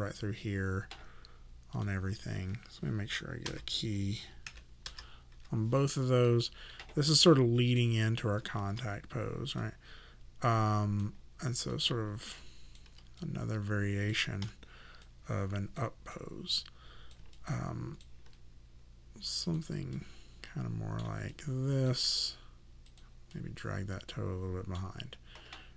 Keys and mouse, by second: 1.7 click, 3.5-5.8 typing, 7.7 click, 8.7 w, 9.6 click, 11.7 click, 12.3 alt+click, 14.5 e, 15.0 click, 17.3 alt+click, 19.5 click, 20.0 middle click, 21.3 alt+click, 23.3 middle click.